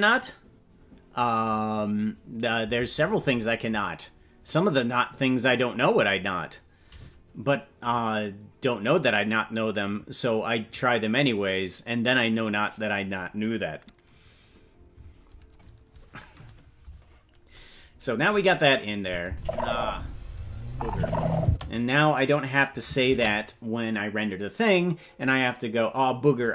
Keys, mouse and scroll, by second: 19.0 click, 19.2 space, 21.5 space, 25.4 ctrl+s.